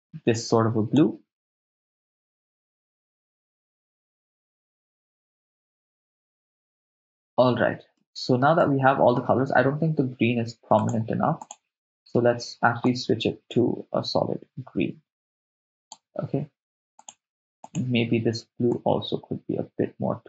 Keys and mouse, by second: 1.7 click, 2.5 click, 3.4 click, 3.5 click, 4.3 click, 4.5 click, 4.8 drag, 5.0 click, 6.2-7.2 middle drag, 7.9-8.4 ctrl+middle drag, 8.6-9.2 middle drag, 10.8 click, 11.4 click, 15.1 click, 17.0 click, 17.7 click.